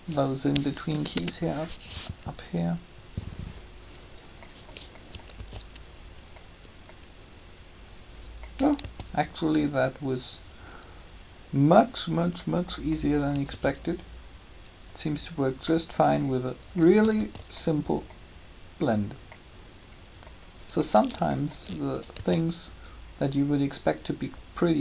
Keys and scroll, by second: 0.9 Delete, 1.0 Return, 5.4 alt+a, 8.8 alt+a, 13.5 alt+a, 17.2 alt+a, 22.2 alt+a.